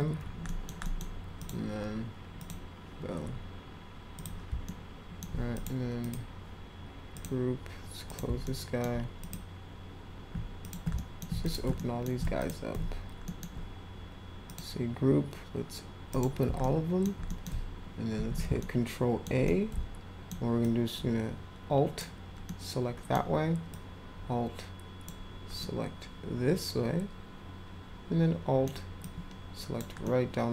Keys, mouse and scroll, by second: 0.5 middle click, 0.8 middle drag, 1.4 click, 2.4 click, 4.2 click, 4.7-5.2 alt+middle drag, 5.5 click, 6.0 click, 7.1 click, 8.0 click, 8.4-8.8 alt+middle drag, 9.2 click, 10.6 ctrl+click, 10.9 alt+middle drag, 11.4 ctrl+click, 11.7 alt+middle click, 12.4 ctrl+click, 13.2 alt+middle click, 14.5 click, 16.1 click, 16.6-17.0 alt+middle drag, 17.3 middle click, 18.2 ctrl+a, 18.6 alt+middle click, 19.4 middle click, 20.6-22.0 alt+drag, 22.4-23.1 alt+middle drag, 23.7-25.1 alt+drag, 25.6-28.6 alt+middle drag, 29.0 alt+click, 30.0-30.5 alt+middle drag.